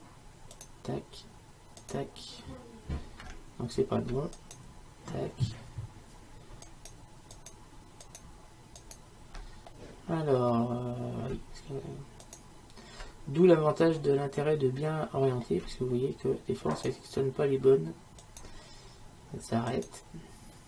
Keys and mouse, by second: 0.6-4.4 drag, 4.4-6.3 right drag, 6.7-9.7 right drag, 9.7-12.3 middle drag, 12.3-14.4 right drag, 14.4-16.8 middle drag, 16.8-20.6 right drag.